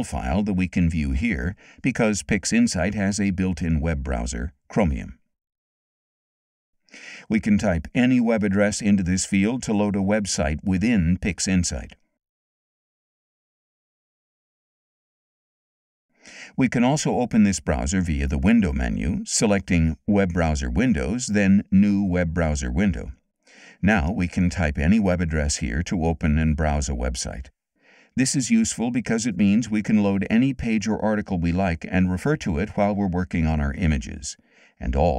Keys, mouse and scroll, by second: 1.2-2.7 scroll down 8, 1.6 middle click, 2.4 middle click, 3.4 middle click, 3.4-4.5 scroll down 6, 4.7 middle click, 4.7-6.7 scroll up 6, 5.0 middle click, 5.8 middle click, 6.2 middle click, 6.5 middle click, 8.5 click, 8.8-12.0 typing, 16.6 click, 17.3 click, 22.5 click, 24.3 click, 24.5-26.5 typing, 31.4 middle click, 31.4 scroll down 2, 32.3 middle click, 32.3-32.7 scroll down 2, 33.2 click, 34.4-35.1 drag.